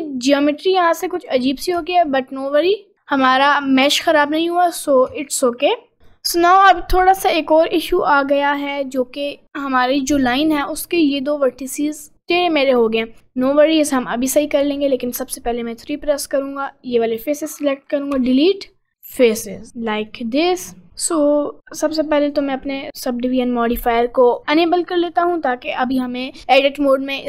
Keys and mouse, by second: 0.0 Tab, 1.1 middle click, 1.8 Tab, 2.3 middle click, 2.9 middle click, 3.5 middle click, 4.2 middle click, 5.1 Tab, 6.0 click, 8.2 click, 14.6 3, 15.8-16.8 drag, 18.2 Delete, 20.1 middle click, 21.0 middle click, 22.0 click, 22.4 click, 24.2 click.